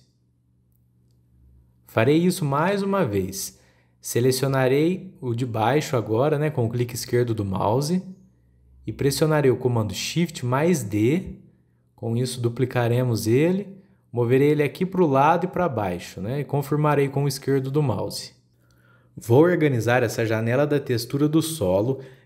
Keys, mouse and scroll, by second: 3.0 middle click, 3.0 scroll down 2, 3.3-5.2 shift+middle drag, 5.2 click, 11.1 shift+d, 20.1-21.0 shift+middle drag, 21.0-21.3 scroll up 6.